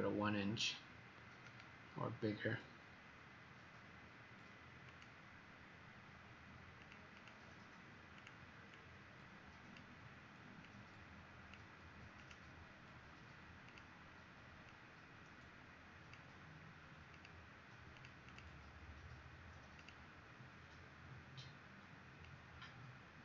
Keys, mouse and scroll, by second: 7.1 click, 8.7 click.